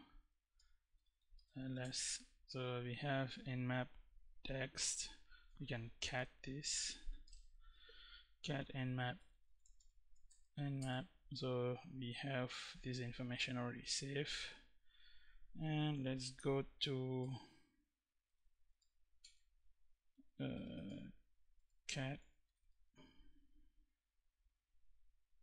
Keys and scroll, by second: 0.2-1.6 typing, 5.4-9.4 typing, 9.9 Tab, 10.4 Return, 15.3-22.6 typing, 25.1-25.4 typing.